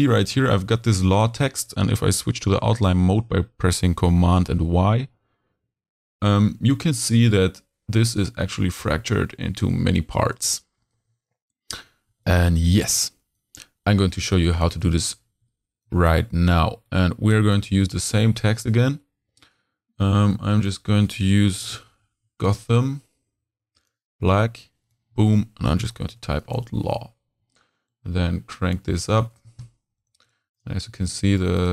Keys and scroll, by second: 2.4 super+y, 10.9 super+y, 12.1 z, 12.8 h, 14.2 z, 14.7 h, 15.8 h, 16.6 z, 18.6 t, 21.4 g, 25.9 shift+l, 26.0 shift+a, 26.1 shift+w, 26.5 shift+super+a, 27.2 super+a.